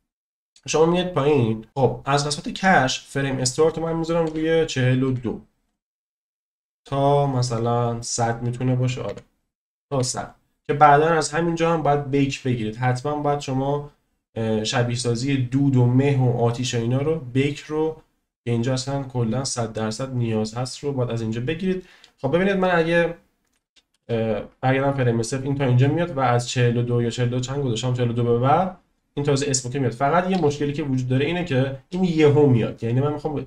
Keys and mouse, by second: 3.4-5.9 drag, 6.9-10.4 drag, 9.9 0, 22.1-22.9 drag, 23.9 space, 30.5 space, 31.5-32.0 drag.